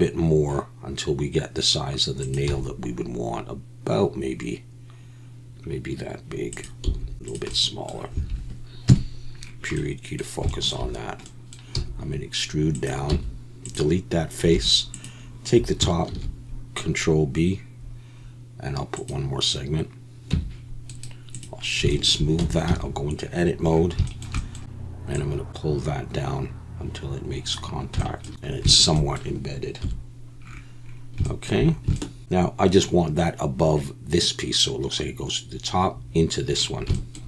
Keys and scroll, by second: 2.5 g, 6.8 s, 8.9 KP_Decimal, 11.7 e, 13.1 x, 14.5 3, 16.1 ctrl+b, 20.3 Tab, 22.4 Tab, 22.7 a, 29.8 KP_7.